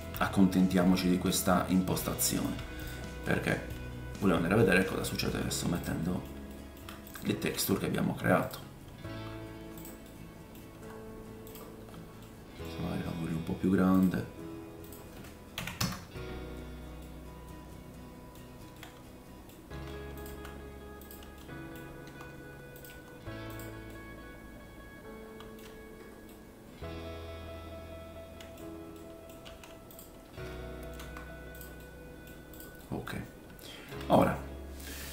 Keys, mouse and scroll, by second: 0.3-0.9 scroll up 1, 0.9-1.4 scroll up 2, 2.5 scroll up 1, 2.8-3.7 drag, 2.8 right click, 3.7-6.8 right drag, 3.7-4.9 scroll down 3, 4.2 middle click, 5.0 shift+middle click, 5.7-6.8 drag, 5.7-7.2 middle drag, 6.4 shift+scroll up 1, 7.2-14.8 drag, 7.5 g, 9.0 r, 10.1 middle click, 10.7 g, 11.7-12.1 scroll down 3, 12.2 middle click, 12.7-13.1 scroll up 1, 13.9 middle click, 13.9 right click, 14.0-14.6 scroll down 1, 17.0 middle click, 18.4-18.7 scroll down 1, 18.7 middle click, 19.7 r, 20.2-23.9 right drag, 20.2 g, 21.4 middle click, 22.0 r, 22.9 g, 23.9-29.4 middle drag, 25.7-26.2 scroll down 2, 29.4-33.1 drag, 29.4 g, 30.9 r, 31.8 middle click, 32.5 right click, 32.8 middle click, 33.1-34.3 right drag, 33.1-34.0 scroll up 4, 34.1 click, 34.1 middle click, 34.3-35.1 drag, 34.5-35.1 scroll down 5.